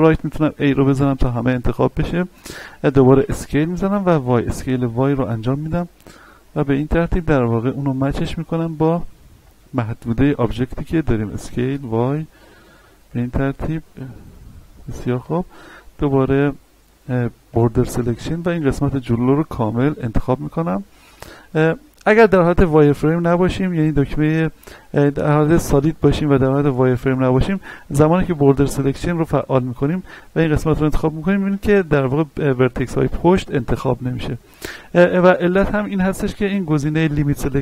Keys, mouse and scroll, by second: 0.1 a, 3.1 s, 4.0 y, 6.7 click, 7.0-7.7 scroll up 1, 7.7 shift+middle click, 8.6 shift+middle click, 9.0 scroll up 1, 9.4 shift+middle click, 10.4 s, 11.3 y, 14.2 click, 14.5-15.2 scroll down 1, 15.2 a, 15.7 shift+middle click, 16.3-16.8 scroll down 1, 17.5 b, 18.2-20.0 drag, 20.0 scroll up 1, 22.2 z, 22.7-23.2 scroll down 1, 25.3 click, 27.5 a, 28.3 b, 29.1-30.9 drag, 30.9-34.8 middle drag.